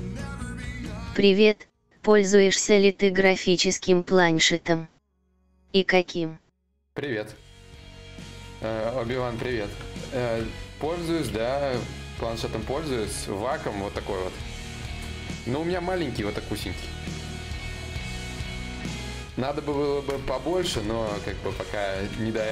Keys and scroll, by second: 10.9 ctrl+z, 10.9 ctrl+y.